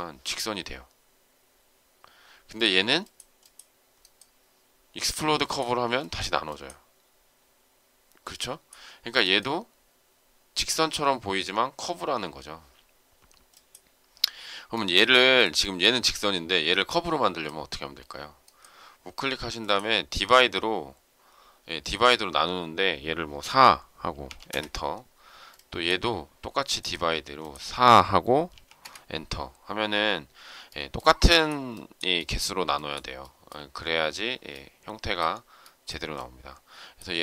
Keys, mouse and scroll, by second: 14.7 shift+middle click, 24.4 Return, 28.7 Return.